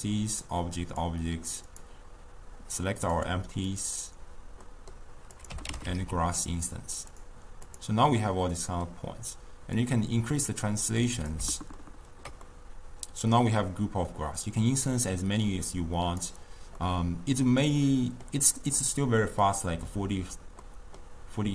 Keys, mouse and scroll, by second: 1.7 click, 3.2-3.9 drag, 4.7 middle click, 5.4 click, 6.0 s, 7.2 click, 7.7 click, 8.6-9.8 middle drag, 9.8-11.8 drag, 11.8-14.9 ctrl+middle drag, 14.9-16.8 drag, 16.8-21.5 middle drag.